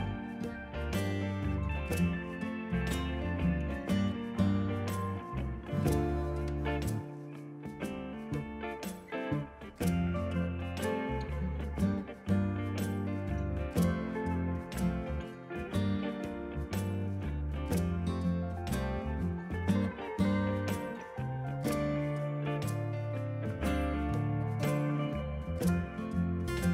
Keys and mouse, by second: 1.7 click, 2.7 ctrl+shift+x, 2.8 click, 3.2 ctrl+1, 3.7 click, 5.1 Delete, 5.2 click, 6.0 alt+y, 6.2 click, 7.0 click, 8.1 click, 9.0 ctrl+1, 9.1 click, 11.4 ctrl+z, 11.5 click, 12.1 click, 15.2 click, 16.0 right click, 16.6 click, 16.8 ctrl+s, 17.8 right click, 18.4 click, 20.4 ctrl+shift+x, 20.5 click, 22.5 ctrl+1, 22.6 click, 22.7 s, 22.9 click, 24.2 click, 24.3 s, 24.5 click, 24.7 ctrl+1, 24.7 click.